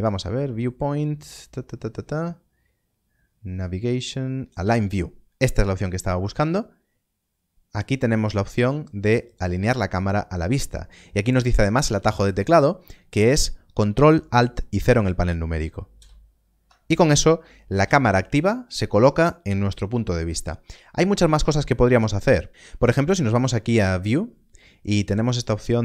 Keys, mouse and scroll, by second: 14.7 click, 16.0 ctrl+alt+KP_0, 23.7 '.